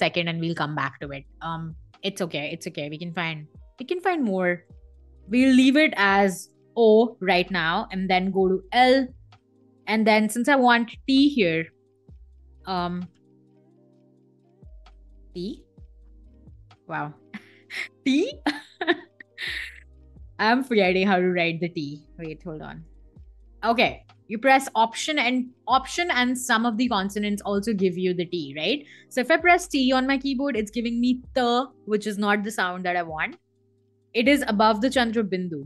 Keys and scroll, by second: 4.3 BackSpace, 4.7 shift+o, 5.9 BackSpace, 6.1 o, 9.0 l, 11.5-13.9 typing, 14.9-17.4 typing, 20.0 t, 21.9 BackSpace, 22.5 alt+t, 28.3 BackSpace, 29.4 t.